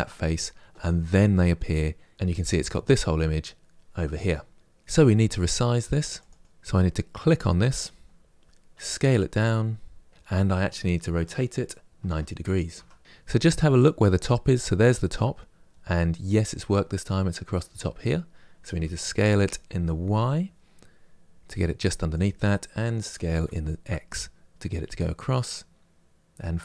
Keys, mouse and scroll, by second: 4.5 click, 5.9 click, 6.4 click, 8.6 s, 10.9 r, 13.0 g, 18.6 s, 22.9 s.